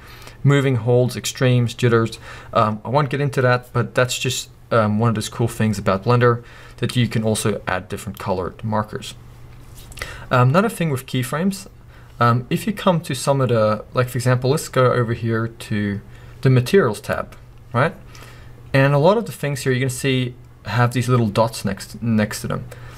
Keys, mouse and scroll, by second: 0.0-17.1 drag, 11.1-13.3 scroll down 1, 18.7 scroll up 1.